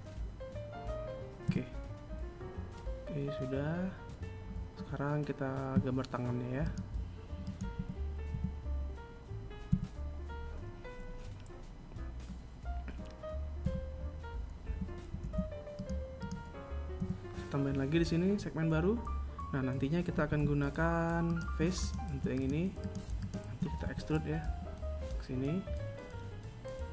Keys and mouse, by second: 4.8 right click, 5.7 right click, 6.0 KP_1, 6.5 Tab, 7.9 KP_1, 11.9 KP_1, 13.4 r, 15.3 a, 18.5 ctrl+Tab, 20.0 right click, 20.6 shift+right click, 21.1 shift+right click, 21.5 shift+right click, 22.1 KP_1.